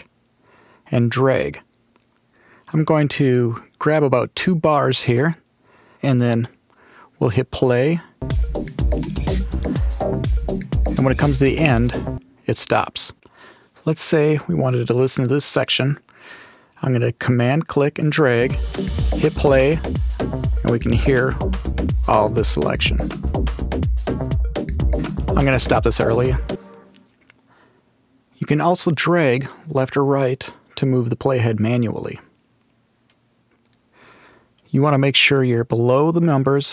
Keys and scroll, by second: 8.1 space, 18.3 super+space, 26.4 space.